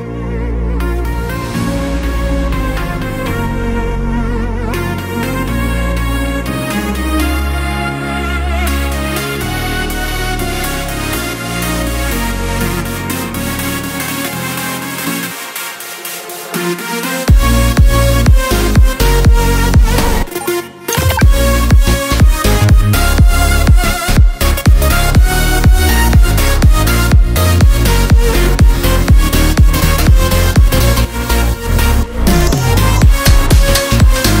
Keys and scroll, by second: 1.3 space, 2.8-9.9 typing, 10.3 Escape, 13.0 Up, 14.1 Down, 15.9 ctrl+alt+c, 16.9 ctrl+alt+v, 18.3 shift+Down, 19.9 Escape, 26.9 Up, 28.6 space, 30.4 Down, 31.7 Up, 31.8 Left, 32.1 Up, 33.2 space, 33.6 r.